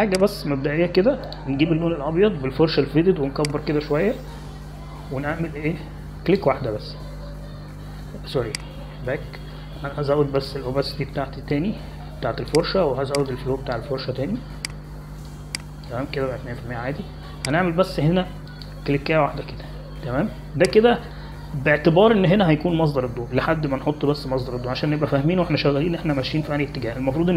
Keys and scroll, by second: 5.8-6.6 typing, 11.0 ctrl+z.